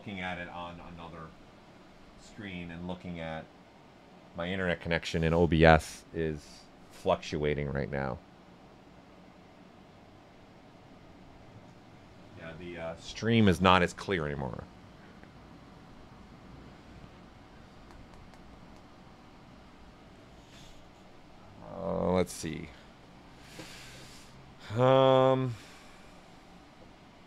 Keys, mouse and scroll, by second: 10.6-14.6 right drag, 26.6 click.